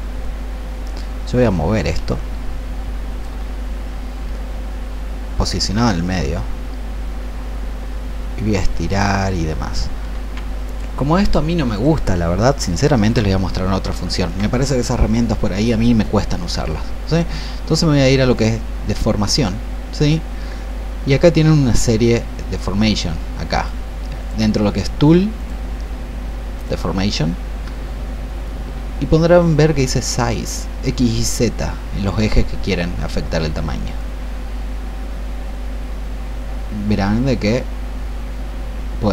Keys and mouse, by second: 1.4-3.2 drag, 5.7-9.9 drag, 11.7-39.1 drag.